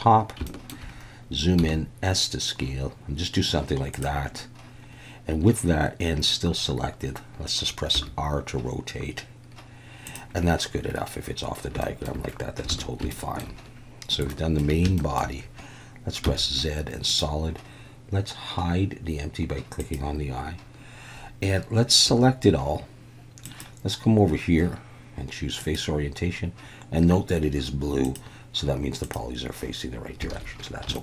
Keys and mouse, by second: 0.5 shift+middle click, 1.6 s, 3.9 click, 7.9 r, 10.1 click, 11.9 shift+middle click, 12.7 alt+a, 13.1 shift+middle click, 14.3 shift+middle click, 15.0 shift+middle click, 16.2 z, 19.8 click, 22.1 a, 23.5 click, 28.0 click, 30.3 alt+a, 30.9 shift+middle click.